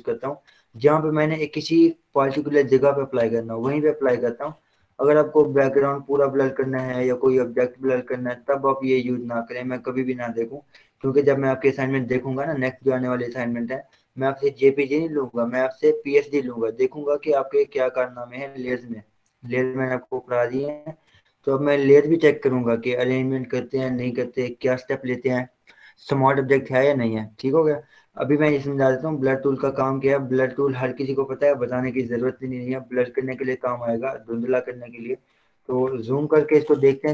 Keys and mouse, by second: 2.7-4.0 drag, 4.0 ctrl+z, 5.1 ctrl+0, 18.6 click, 19.7 click, 29.8 right click, 30.8 click, 31.5-33.0 typing, 36.1 z.